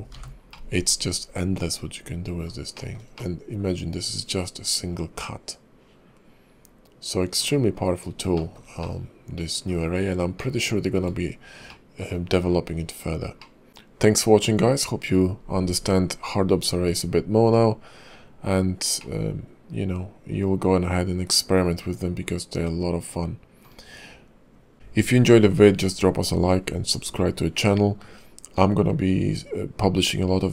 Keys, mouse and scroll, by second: 0.1 h, 0.5 middle click, 2.7 shift+middle click, 3.2 middle click, 7.7-8.1 scroll down 4, 8.3 shift+middle click, 8.8 middle click, 9.9-10.4 scroll up 3, 10.4 shift+middle click, 11.2-11.7 scroll down 2, 11.7 middle click, 19.0 middle click.